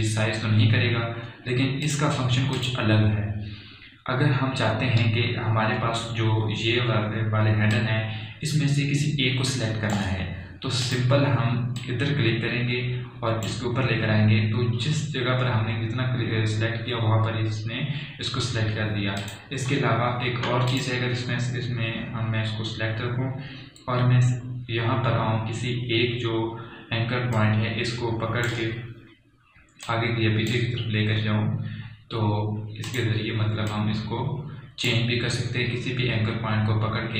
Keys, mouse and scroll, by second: 3.1 click, 7.3 click, 7.5 alt+scroll up 1, 9.0 click, 9.1-17.3 drag, 11.9 typing, 13.8-14.5 typing, 20.5 click, 21.2 alt+scroll down 1, 22.1 click, 22.1 click, 28.7-37.1 drag.